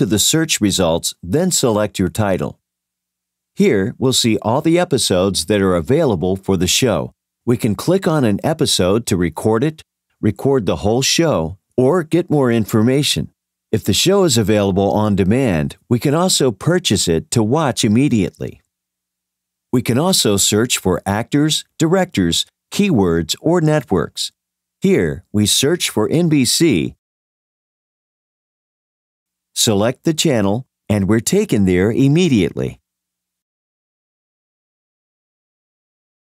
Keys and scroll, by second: 1.9 Return, 8.6 Return, 31.2 Return.